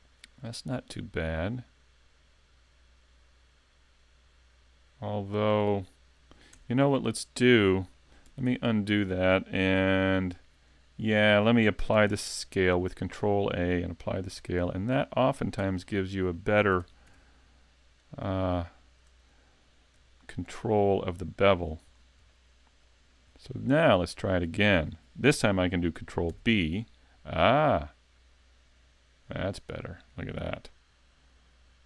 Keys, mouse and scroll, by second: 6.6 Tab, 6.9 middle click, 8.5 z, 9.8 n, 12.1 ctrl+a, 14.3 n, 14.8 scroll down 1, 15.1 middle click, 15.6 Tab, 15.8 scroll up 1, 16.0 middle click, 16.8 ctrl+Tab, 18.0 right click, 18.8 shift+right click, 19.3 middle click, 20.5 shift+right click, 21.5 shift+right click, 21.9 scroll down 2, 22.3 middle click, 23.0 scroll up 2, 23.4 middle click, 24.1 middle click, 26.3 ctrl+b.